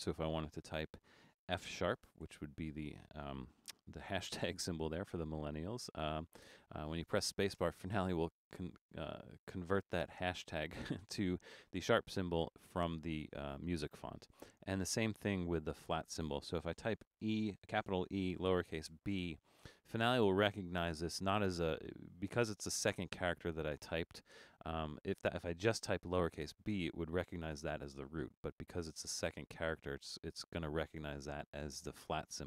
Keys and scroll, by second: 1.4 shift+f, 2.2 shift+#, 7.7 space, 17.2 shift+e, 19.0 b.